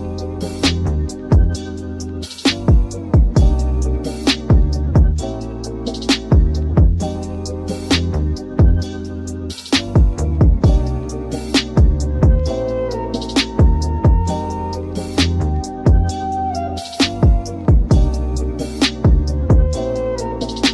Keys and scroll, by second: 4.9 alt+Right, 11.8 super+z, 16.2 alt+Right, 20.1 super+z.